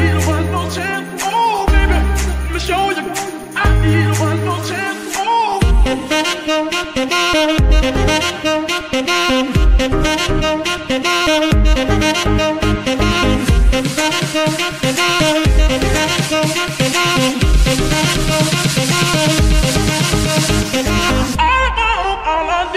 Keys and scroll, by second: 1.3 shift+a, 1.7 alt+g, 1.8 r, 2.1 s, 2.8 KP_Decimal, 12.8 r, 12.9 x, 14.6 Escape, 15.9 r, 17.4 Escape, 18.1 r, 18.8 Escape, 19.2 g, 19.6 Escape, 20.1 g, 21.0 Escape, 21.6 g.